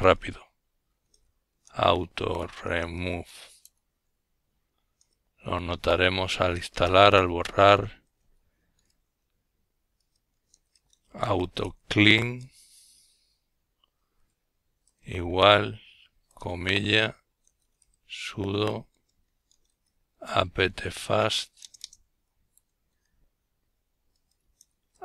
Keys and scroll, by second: 1.5 Return, 2.0-3.6 typing, 4.8-7.6 typing, 9.5 typing, 11.0-22.6 typing.